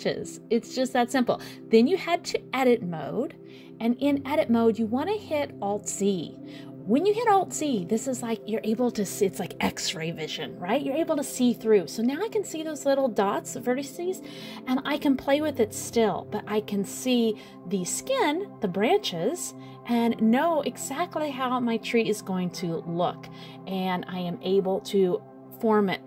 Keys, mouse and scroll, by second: 0.1 click, 3.1 alt+z, 3.6 middle click, 4.1-4.5 scroll up 3, 4.5 middle click, 4.9 scroll down 1, 5.0 shift+middle click, 5.5 scroll up 3, 6.1 middle click, 7.7 scroll down 2, 8.0 middle click, 9.2 middle click, 11.5 middle click, 12.5 middle click, 14.5 middle click, 16.1 click, 21.2 s.